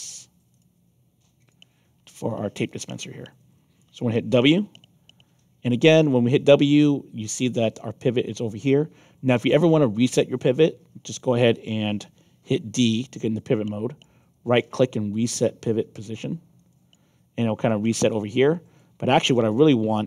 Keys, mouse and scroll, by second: 0.5 shift+click, 1.3 shift+click, 2.6-3.7 alt+drag, 4.7 w, 5.6 alt+click, 12.8 d, 14.0-16.9 right drag, 16.5 click, 17.6-18.7 alt+drag.